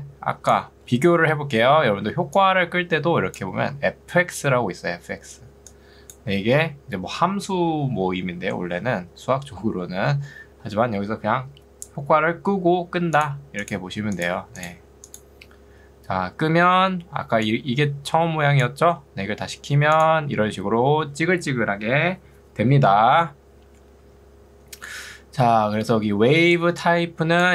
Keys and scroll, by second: 1.2 Escape, 2.0 ctrl+2, 8.2 Escape, 17.2 ctrl+2, 19.2 Escape, 25.8 ctrl+2.